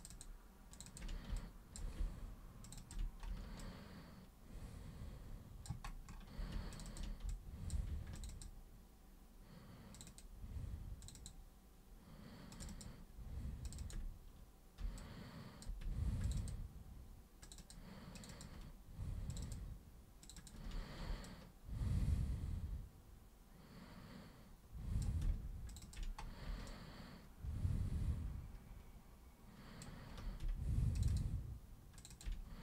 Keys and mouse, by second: 0.7 ctrl+shift+super+click, 0.8 ctrl+shift+super+click, 1.3 alt+super+click, 2.6 ctrl+shift+super+click, 3.6-5.6 alt+super+drag, 6.7 ctrl+shift+super+click, 6.9 ctrl+shift+super+click, 7.3 alt+super+click, 8.1 ctrl+shift+super+click, 9.9 ctrl+shift+super+click, 10.1 ctrl+shift+super+click, 11.0 ctrl+shift+super+click, 11.2 ctrl+shift+super+click, 12.5 ctrl+shift+super+click, 13.7 ctrl+shift+super+click, 13.8 ctrl+shift+super+click, 15.0 alt+super+click, 16.2 ctrl+shift+super+click, 16.4 ctrl+shift+super+click, 17.4 ctrl+shift+super+click, 18.2 ctrl+shift+super+click, 19.3 ctrl+shift+super+click, 20.2 ctrl+shift+super+click, 20.4 ctrl+shift+super+click, 21.1 super+space, 21.2-25.0 drag, 25.7 ctrl+shift+super+click, 26.7-29.8 alt+super+drag, 31.0 ctrl+shift+super+click, 32.0 ctrl+shift+super+click.